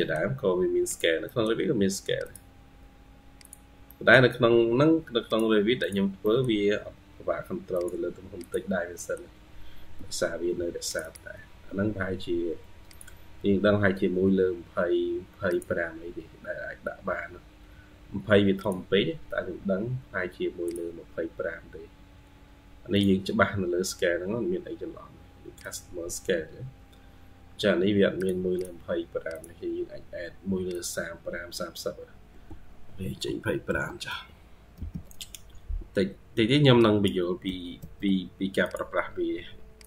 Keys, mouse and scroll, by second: 1.1 middle click, 3.7 middle click, 6.1 middle click, 8.8 middle click, 10.0 Escape, 19.6-20.7 scroll up 30, 25.5 scroll down 10, 28.4 double click, 37.3-37.6 typing.